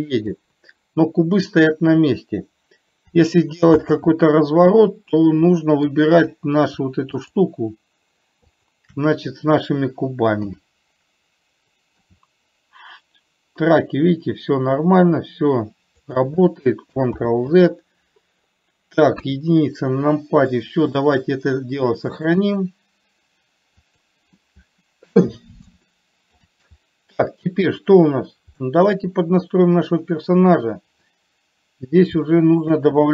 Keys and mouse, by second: 4.2 ctrl+z, 5.4-6.3 middle drag, 7.6 shift+click, 8.9 shift+click, 10.8 KP_7, 12.4 r, 17.6 ctrl+z, 19.6 KP_1, 20.9 shift+middle click, 22.6-24.6 drag, 26.2-26.7 shift+middle drag, 28.1 click, 29.1-31.2 middle drag, 32.6 shift+middle click.